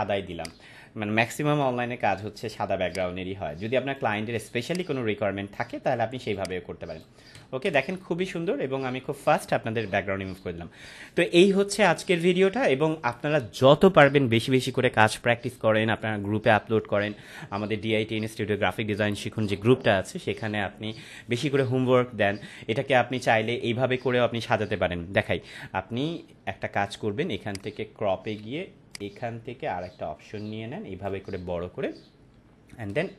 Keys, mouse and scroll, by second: 1.6 c, 2.9-4.1 drag, 8.2 ctrl+0, 10.3 ctrl+-, 27.5-31.1 drag.